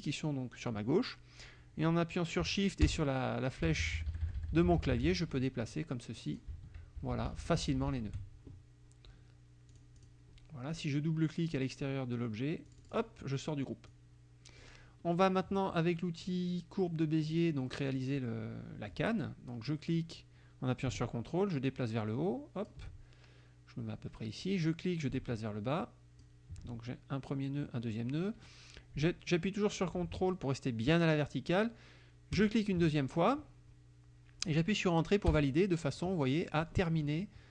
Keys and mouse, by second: 2.9 shift+Left, 3.7 shift+Left, 6.2 click, 7.0 shift+Right, 9.7 click, 12.7 click, 13.9 click, 17.3 click, 17.7 middle click, 19.7-22.9 drag, 24.5-26.4 drag, 32.4 ctrl+click, 35.3 Return.